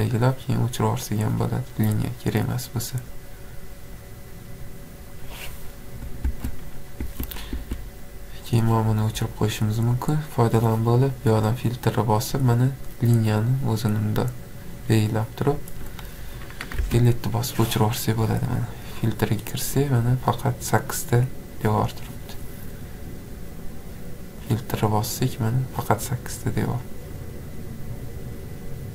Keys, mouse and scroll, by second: 1.8 click, 3.1 click, 4.1 click, 5.3 click, 6.3 Escape, 6.7 scroll down 1, 6.8 scroll, 7.0 Escape, 7.2 scroll down 3, 7.6 Escape, 10.5-11.4 scroll, 12.5 4, 13.6 click, 13.9 click, 15.7 click, 16.8 Delete, 17.6-18.6 scroll, 18.6 click, 24.5 click, 25.0 click, 27.0 click.